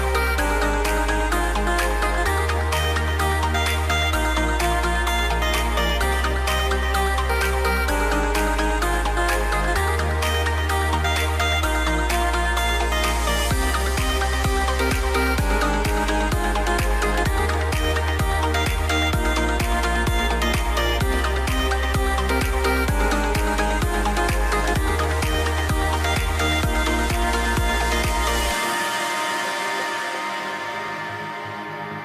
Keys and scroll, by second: 0.9 super+z, 1.3 a, 3.7-6.5 typing, 7.8 BackSpace, 8.4 v, 9.9 BackSpace, 19.3 shift+x, 20.0 super+z, 20.2 super+z, 22.0-23.4 typing, 27.8 v.